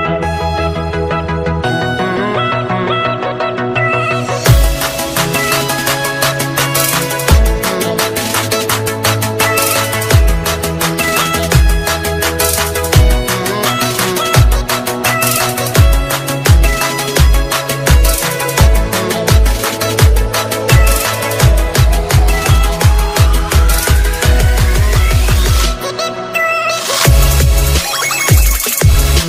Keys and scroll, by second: 3.3 ctrl+space, 10.5 alt+space, 11.5 ctrl+space, 15.4 ctrl+space, 19.9 ctrl+space.